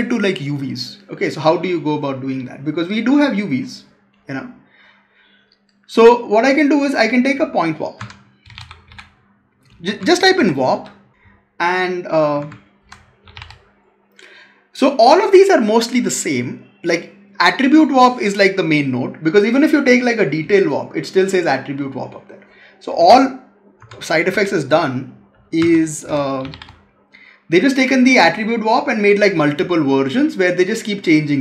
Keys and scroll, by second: 7.8 Tab, 12.3 Tab, 22.8 Delete, 23.7 Tab, 25.4 Tab.